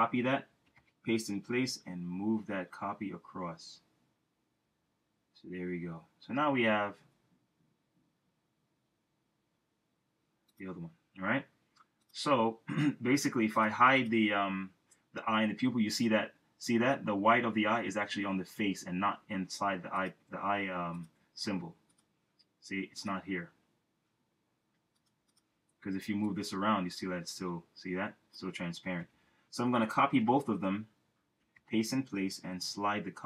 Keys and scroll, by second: 0.7 shift+super+v, 1.6 shift+Right, 29.0 super+z, 30.1 super+c, 31.5 shift+super+v, 32.4 shift+Right.